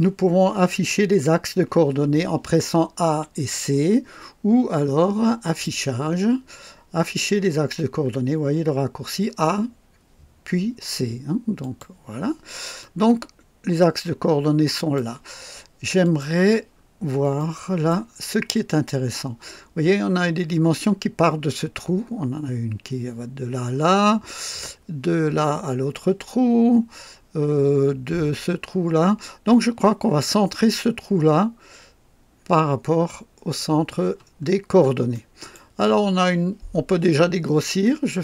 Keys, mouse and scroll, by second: 5.4 click, 11.6 click, 12.8-15.1 drag, 16.0 click, 16.7 scroll up 1, 17.4-18.1 right drag, 18.1-18.4 scroll down 2, 18.6 scroll up 2, 34.5 scroll up 2, 35.1-35.7 right drag.